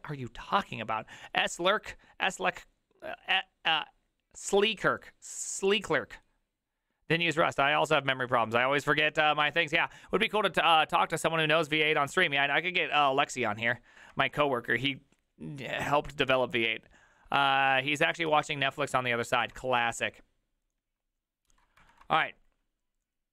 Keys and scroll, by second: 18.3 alt+{, 19.5 alt+[, 22.0 alt+f.